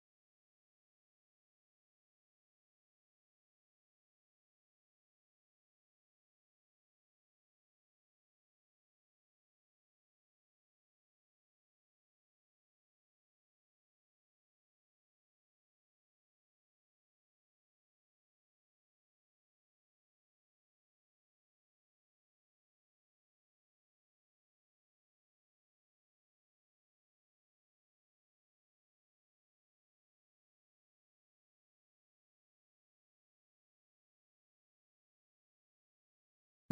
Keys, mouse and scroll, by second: 0.6 s, 2.1 g, 4.0 s, 5.4 g, 7.4 shift+d, 10.5 g, 14.1 click, 14.7 shift+z, 15.1 click, 16.2 click, 16.9 shift+click, 17.8 KP_3, 18.1 KP_Enter, 19.2 s, 21.1 Tab, 21.7 KP_1, 22.3 Tab, 23.7 g, 26.2 g, 27.4 r, 28.5 g, 30.0 r, 31.3 KP_1, 32.0 click, 33.7 click, 35.1 click.